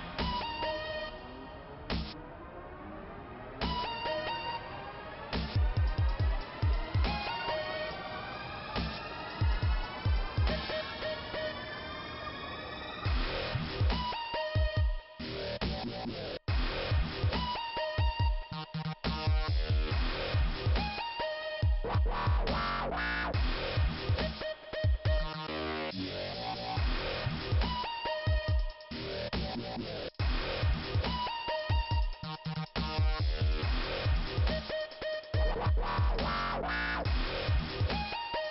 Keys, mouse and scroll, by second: 0.8 click, 2.5 click, 3.1 scroll down 2, 3.3 ', 4.9 click, 5.2 click, 9.6 click, 12.3 Delete, 13.9 click, 16.1 click, 22.0 middle click, 24.4 click, 27.0 click, 28.5 click, 30.4 click, 31.3 click, 31.3 click, 31.8 click, 32.9 click, 33.4 click, 33.5 double click, 34.5 double click, 36.0 click, 36.8 click, 37.6 Delete, 38.4 click.